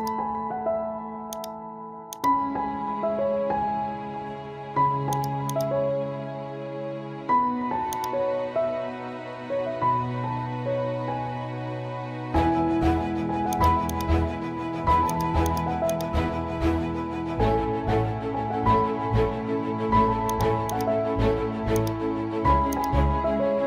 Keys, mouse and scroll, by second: 0.9 z, 1.3-3.8 drag, 3.8 ctrl+z, 5.1-8.2 drag, 10.2 z, 13.5-18.6 drag, 18.6 ctrl+z, 20.3 click.